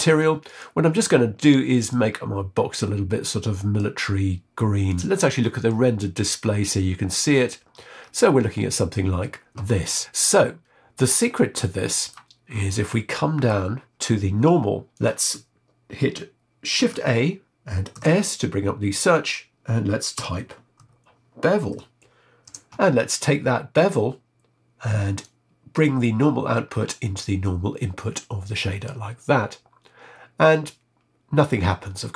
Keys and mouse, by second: 0.4 click, 5.6 click, 9.9-11.1 middle drag, 11.5 middle click, 12.5-13.5 middle drag, 14.9 click, 16.7 shift+a, 25.2-28.9 drag.